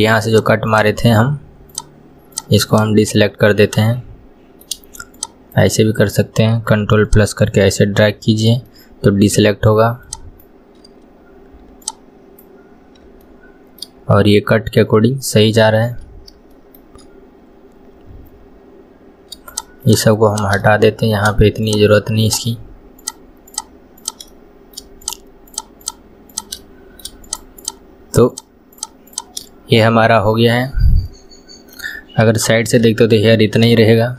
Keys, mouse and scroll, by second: 0.4 shift+click, 0.7 shift+click, 1.8 shift+click, 2.4 shift+click, 2.7 shift+click, 3.0 shift+click, 3.7 shift+click, 4.0-5.2 middle drag, 5.2 shift+click, 7.1 ctrl+click, 8.1-10.1 ctrl+middle drag, 10.1 shift+click, 11.9 ctrl+click, 13.3-16.0 middle drag, 16.0-16.6 scroll down 2, 16.6 shift+middle click, 17.4-19.6 scroll up 1, 19.6 shift+click, 19.9 shift+click, 20.4 shift+click, 20.6-21.7 middle drag, 21.7 shift+click, 22.3 shift+click, 23.0 shift+click, 23.5 shift+click, 24.0 shift+click, 24.4 middle click, 25.1 shift+click, 25.5 shift+click, 25.9 shift+click, 26.4 shift+click, 26.6 middle click, 27.3 shift+click, 27.6 shift+click, 28.4 shift+click, 28.8 shift+click, 29.1 shift+click, 29.5-30.8 middle drag, 30.8 scroll down 1, 31.1-32.3 middle drag, 32.3 KP_3, 33.0 scroll up 2, 33.9-34.1 shift+middle drag.